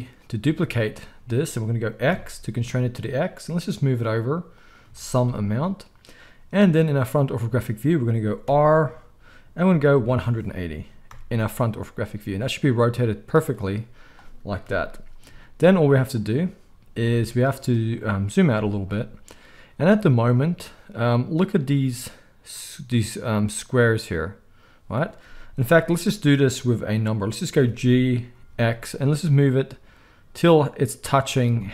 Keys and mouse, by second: 0.4 shift+d, 8.4 r, 12.7-31.4 middle drag, 14.6 KP_1, 15.2 z, 27.5 g, 31.4 shift+click.